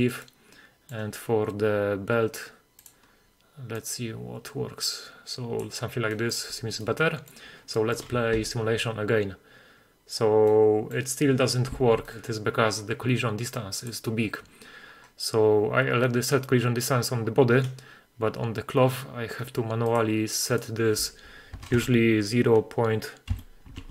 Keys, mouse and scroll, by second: 0.3-1.0 middle drag, 1.8-2.3 scroll up 4, 2.9 click, 3.1-3.8 scroll down 2, 3.8 click, 3.8 scroll down 2, 6.1 middle drag, 6.9-7.3 middle drag, 7.8 middle click, 8.4 shift+space, 10.6-11.1 middle drag, 11.8 shift+space, 12.1 middle click, 12.2 click, 13.9 click, 14.5-15.5 scroll down 7, 15.5-17.3 scroll down 19, 17.3 scroll down 4, 18.5-19.3 scroll up 2, 19.3-19.9 scroll down 1, 19.9-23.9 drag, 19.9-20.6 scroll down 1, 21.8 BackSpace.